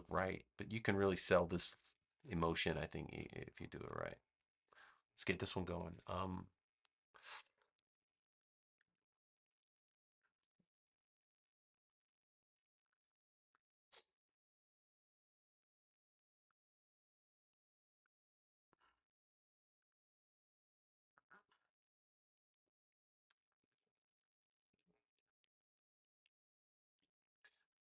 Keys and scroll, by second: 1.6 space, 3.5 space, 10.3 super+=, 11.2 space.